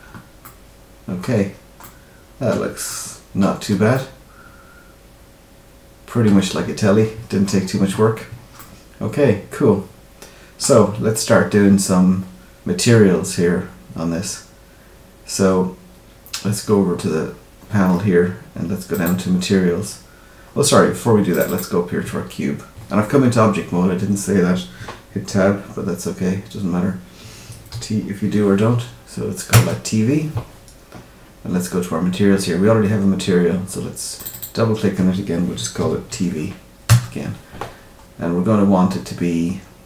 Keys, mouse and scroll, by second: 0.4 middle click, 1.3-1.8 scroll down 4, 1.8 middle click, 2.5 Tab, 2.8 middle click, 3.5 scroll down 2, 3.9 middle click, 7.6-8.4 scroll up 2, 8.5 middle click, 16.8-17.7 scroll down 6, 19.0 click, 21.3 click, 21.4 click, 34.1 click, 34.3 click, 38.3-38.6 scroll down 2, 38.9-39.5 scroll down 3.